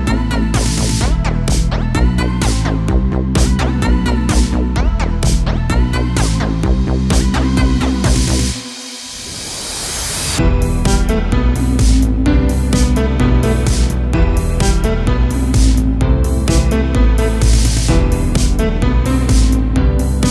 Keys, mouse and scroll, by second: 0.2 shift+middle click, 1.0 3, 1.1 click, 2.0 click, 2.5 KP_Add, 3.2 s, 6.1 a, 6.3 2, 6.5 click, 6.6 click, 7.1 KP_1, 7.8 g, 9.6 click, 9.9 g, 11.7 a, 12.1 middle click, 12.8-13.2 scroll up 1, 13.2-16.5 middle drag, 16.5 2, 16.7 click, 16.9 click, 17.2 s, 19.6 middle click, 20.1-20.3 scroll up 1.